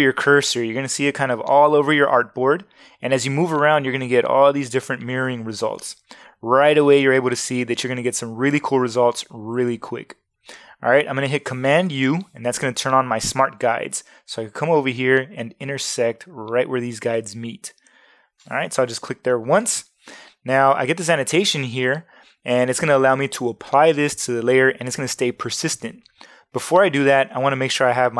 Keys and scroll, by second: 11.9 super+u.